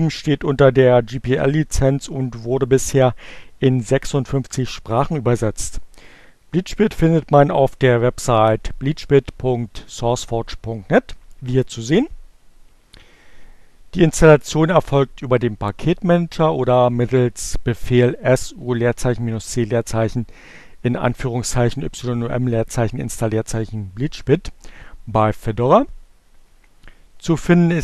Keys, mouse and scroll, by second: 17.7 click.